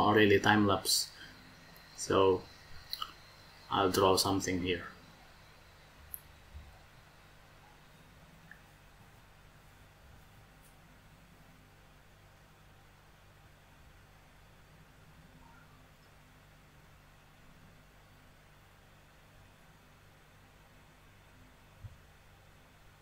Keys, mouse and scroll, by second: 15.9 e.